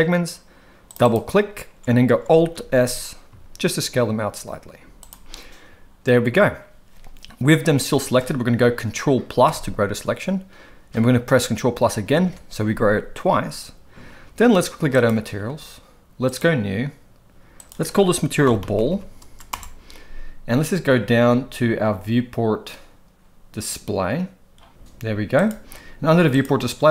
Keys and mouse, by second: 2.5 alt+s, 9.4 ctrl+KP_Add, 12.1 ctrl+KP_Add, 15.0 click, 17.6-19.5 drag, 18.9 l, 25.3 click, 26.3 click.